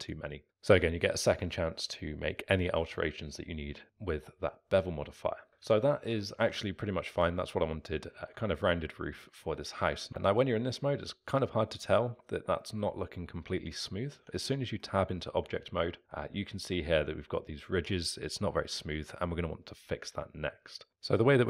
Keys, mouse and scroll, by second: 5.0-5.6 middle drag, 5.6 Tab, 6.2-10.1 alt+middle drag, 10.1 Tab, 14.1 Tab, 14.8-18.1 middle drag, 18.8 z, 20.1 z, 20.9 space.